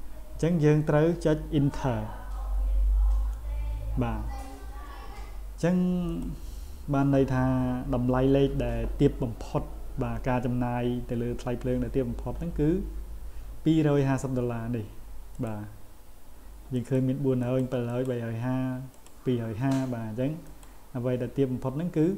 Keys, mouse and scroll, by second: 6.1 click, 15.3 click, 16.8 click, 17.4 click, 17.9 click, 18.9 click, 20.5 click.